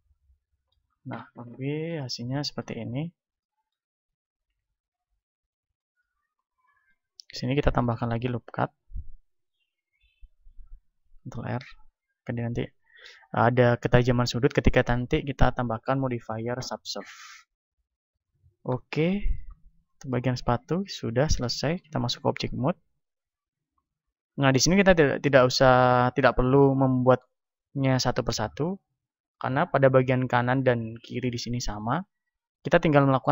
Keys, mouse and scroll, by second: 2.9 a, 4.6 KP_1, 6.3-8.9 middle drag, 8.9 ctrl+r, 12.1-13.9 drag, 15.9-17.1 middle drag, 17.1 a, 17.6-23.8 middle drag, 18.2 Tab, 20.5 a, 22.8 KP_1, 23.8-33.3 right drag.